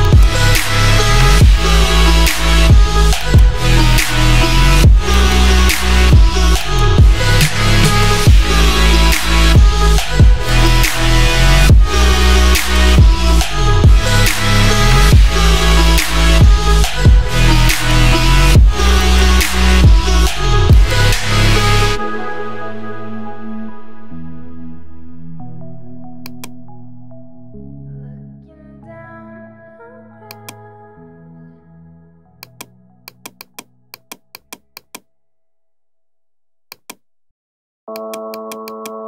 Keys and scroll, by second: 24.8 ctrl+j.